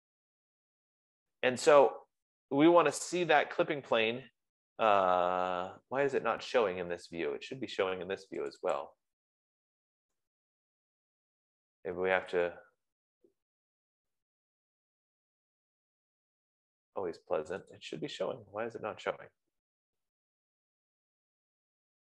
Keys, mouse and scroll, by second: 0.7 Escape, 9.0 click, 9.6 click, 11.4-12.4 scroll, 12.8 click, 14.3-15.3 scroll, 15.3-15.7 scroll, 16.2-17.7 scroll, 18.6 click, 21.0-21.6 scroll.